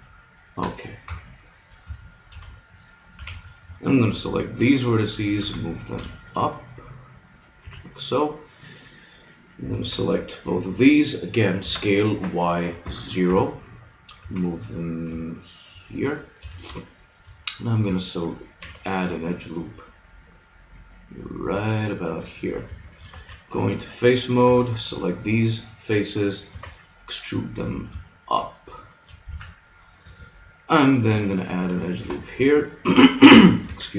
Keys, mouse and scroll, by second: 1.1 KP_Decimal, 1.9 middle click, 3.2 a, 4.1 b, 5.4 g, 7.6 a, 9.8 b, 11.6 s, 14.2 g, 16.1-18.4 drag, 16.4 a, 18.6 ctrl+r, 22.2 click, 22.7 a, 23.1 ctrl+Tab, 24.4 b, 26.5 e, 29.3 a, 31.1 ctrl+r, 33.7 ctrl+Tab.